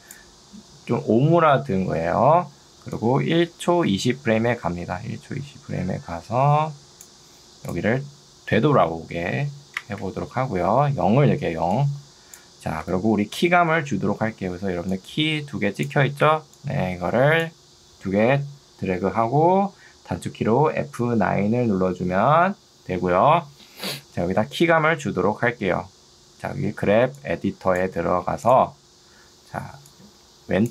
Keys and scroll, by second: 9.4 0, 9.8 Return, 11.6 ctrl+2, 13.0 Escape, 14.6 ctrl+2, 16.4 Escape, 21.0 F9, 27.0 ctrl+2, 28.2 Escape.